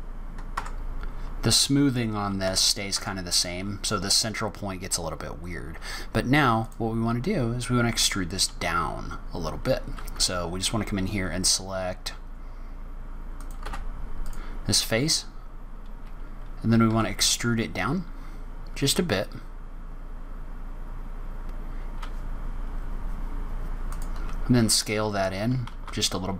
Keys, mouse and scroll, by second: 0.5 Tab, 2.4 Tab, 2.9 Tab, 6.5 click, 13.3 click, 13.5 3, 14.1 click, 16.8 e.